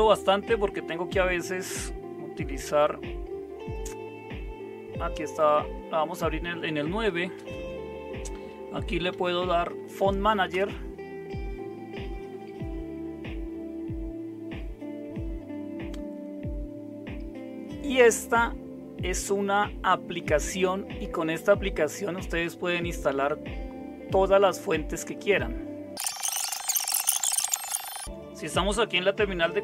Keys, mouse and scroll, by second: 4.0 super+0, 5.6 super+9, 7.3 super+space, 8.6-10.5 typing, 27.8 super+w, 28.0 super+5.